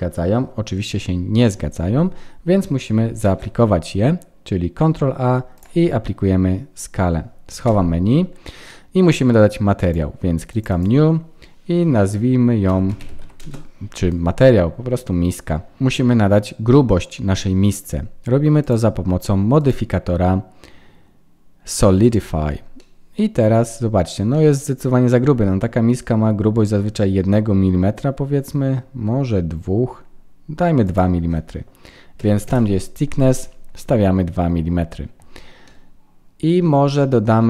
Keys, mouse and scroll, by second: 3.2 ctrl+a, 9.7 click, 10.6 click, 16.6 middle click, 18.6 click, 22.7 middle click, 23.7-24.2 scroll up 1, 25.2 middle click, 30.8 click, 35.6 middle click.